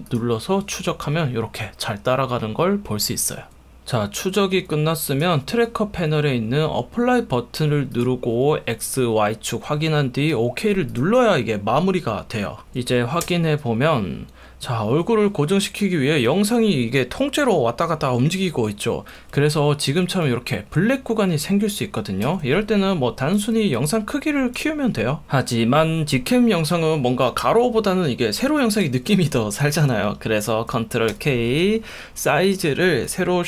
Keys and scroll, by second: 6.0 F1, 7.6 F1, 8.9 F1, 10.3 F1, 12.6 1, 13.2 space, 20.1 F1, 22.3 F1, 31.1 super+k.